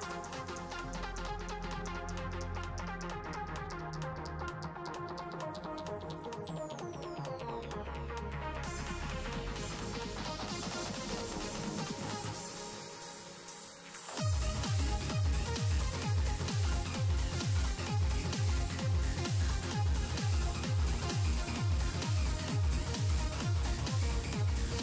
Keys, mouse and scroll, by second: 6.1-9.7 middle drag, 9.7 shift+d, 11.8 s, 13.0-15.6 middle drag, 15.6 g, 19.1 g, 21.2 r, 21.5 r, 23.9 s.